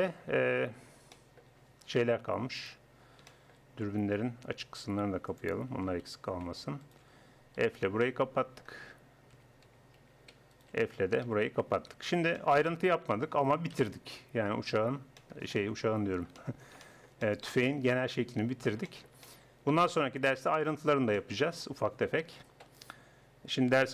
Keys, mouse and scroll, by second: 1.9 Tab, 2.3 Tab, 3.3 middle click, 3.4 middle click, 3.9 Tab, 5.7 a, 6.1 a, 7.6 f, 8.1 click, 9.3 a, 9.7 a, 10.1 a, 11.3 f, 11.8 Tab, 13.7 KP_1, 17.5 middle click, 18.2 middle click, 19.3 middle click.